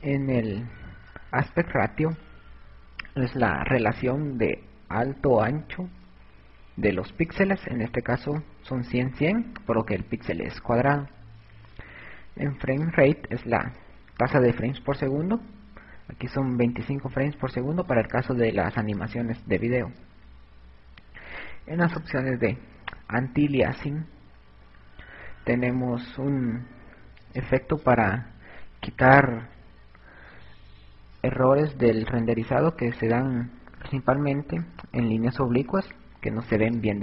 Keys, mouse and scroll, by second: 18.9 click.